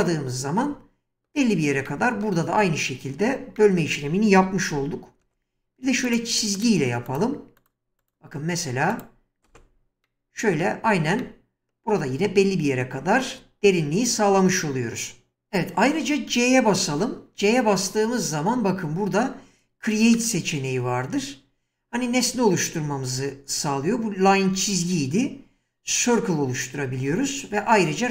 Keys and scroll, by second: 4.4 1, 5.2 space, 9.5 space, 15.4 c, 16.9 c, 24.5 space.